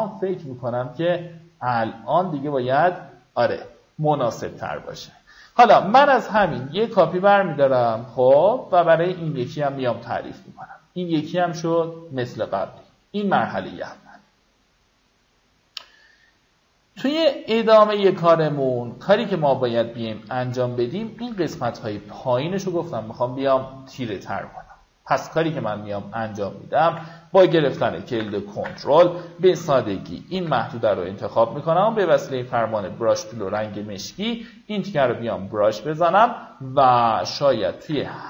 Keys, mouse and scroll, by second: 7.6 alt+click, 17.0 click, 19.9-20.2 alt+scroll down 1, 20.2-20.6 alt+scroll up 2, 21.0-22.4 drag, 25.9 ctrl+click, 27.7 ctrl+alt+shift+n, 30.0 b, 31.0 alt+right click, 31.6 click, 33.1 ctrl+d, 36.8 ctrl+click.